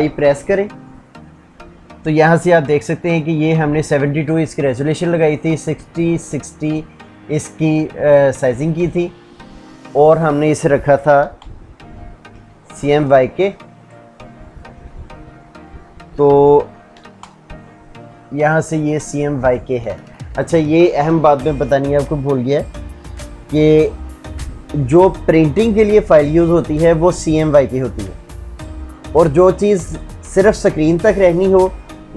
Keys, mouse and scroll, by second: 9.8 Escape, 10.8 alt+i, 11.8-12.6 typing, 16.6 alt+i, 16.9 m, 18.1 Down, 19.4 Escape.